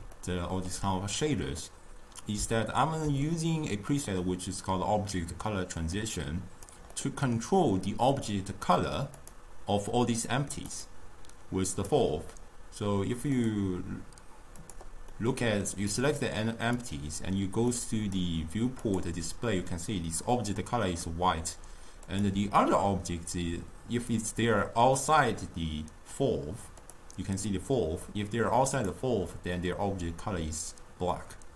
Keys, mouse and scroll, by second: 6.0-7.0 drag, 7.0-9.3 middle drag, 9.3 click, 10.8 click, 11.8 click, 13.4 click, 14.6 click, 15.2-16.8 middle drag, 16.8 click, 17.8-22.0 drag, 22.1 click, 26.9 click, 28.8 click.